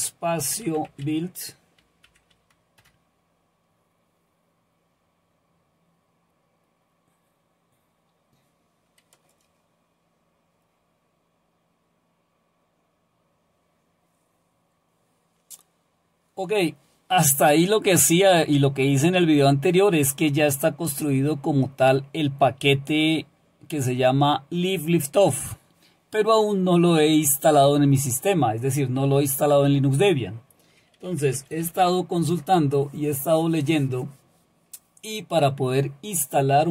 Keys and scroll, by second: 0.0-2.1 typing, 2.8 Return, 30.8-32.1 typing, 32.3 Return, 33.9 typing.